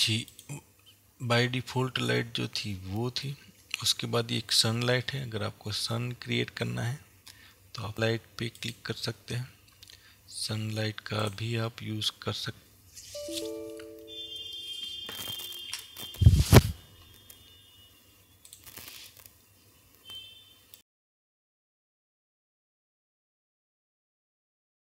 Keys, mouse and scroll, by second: 1.0-3.3 drag.